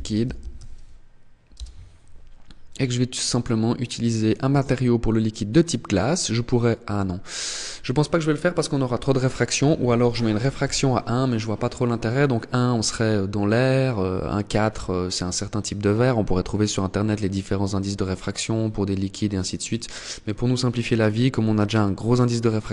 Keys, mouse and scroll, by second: 1.9 click, 8.8 click, 19.0 click.